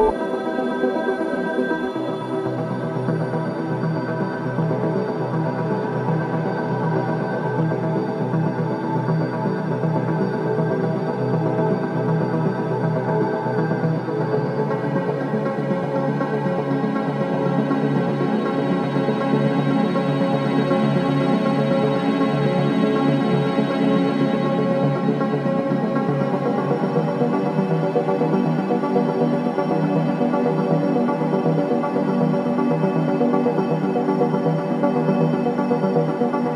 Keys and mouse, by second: 5.0-5.9 alt+shift+drag, 6.6-7.2 ctrl+alt+drag, 8.9 typing, 9.7 click, 11.0-11.3 typing, 12.9 click, 15.1-16.8 drag, 16.8-17.2 typing, 18.5-20.5 drag, 20.5-20.9 typing, 21.8-22.8 drag, 24.4-26.2 drag, 26.5 typing, 27.5-29.1 drag, 29.1 typing, 29.9-30.2 drag, 30.8 typing, 31.4 click, 32.0-32.4 typing, 34.0 click.